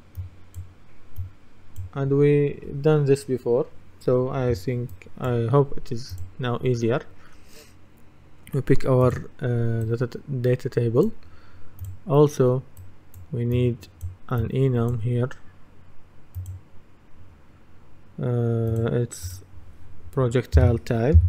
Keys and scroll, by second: 20.6-21.2 typing.